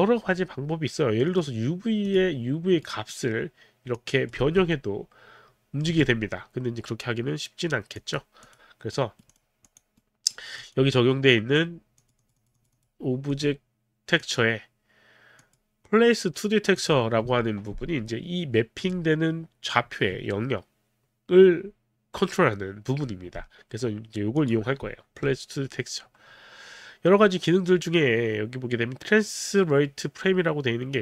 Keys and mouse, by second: 1.2 click, 2.0 click, 2.8 right click, 4.0 click, 4.4 w, 4.8 middle click, 5.8 z, 7.9 click, 8.5 click, 8.9 right click, 8.9 click, 9.3 right click, 9.7 click, 10.0 right click, 10.3 right click, 10.3 click, 10.5 right click, 11.0 click, 12.0 click, 12.2 click, 13.2 click, 14.2 click, 15.4 click, 16.8 click, 18.7 click, 24.3 click.